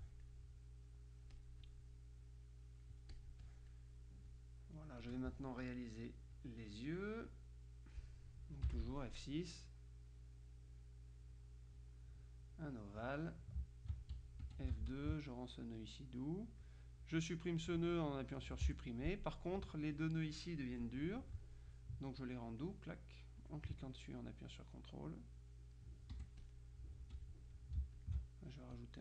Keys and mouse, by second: 0.0 ctrl+click, 1.4-3.8 drag, 4.4-5.6 drag, 6.4 click, 7.4-8.5 drag, 8.8 F6, 9.8-13.6 drag, 14.5 F2, 15.0 ctrl+click, 16.5 click, 17.3 click, 18.8 Delete, 22.6 ctrl+click, 23.4 click, 24.4-26.3 drag, 26.2 F1, 26.4 click, 27.1 F2, 27.2 click, 28.0 ctrl+alt+click, 28.8-29.0 drag.